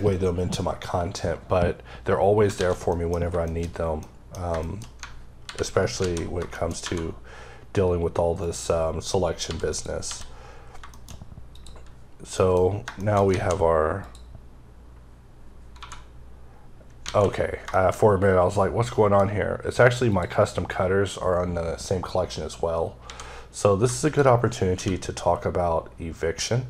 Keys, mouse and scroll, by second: 1.8-2.2 scroll down 2, 2.4 a, 2.7 middle click, 2.9-3.8 scroll down 5, 3.3 shift+middle click, 3.8 middle click, 5.3 alt+h, 6.1 scroll down 3, 6.4 shift+middle click, 6.6 1, 8.3 click, 9.3 h, 9.5 click, 9.9 h, 10.3 scroll up 3, 10.8 shift+middle click, 11.3 click, 12.2 middle click, 12.4-13.1 scroll up 5, 12.8 shift+middle click, 13.1 alt+a, 13.8 click, 15.6-16.5 scroll down 2, 16.5 scroll up 3, 16.9 alt+a, 17.5 middle click, 17.8-18.7 scroll up 2, 18.7 middle click, 19.2-19.8 scroll up 2, 19.9 click, 21.6-22.1 scroll down 3, 22.9 a, 23.9 shift+click, 24.5 q.